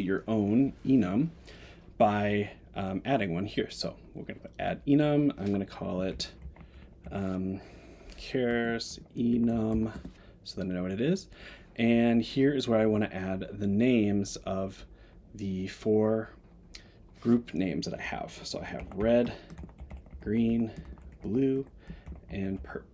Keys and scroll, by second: 9.9 Return, 19.2 Tab.